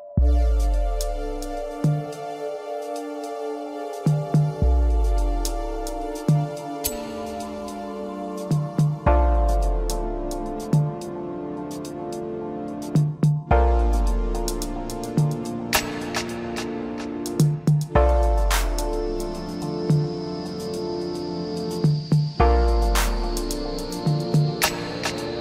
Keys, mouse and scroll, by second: 3.1-3.6 drag, 3.6-5.1 middle drag, 5.1 KP_1, 6.1 click, 7.6 Tab, 9.4-11.5 drag, 11.5 s, 14.3 middle click, 15.2 click, 16.1 shift+click, 16.7-18.1 middle drag, 22.4-23.5 middle drag, 23.5 e.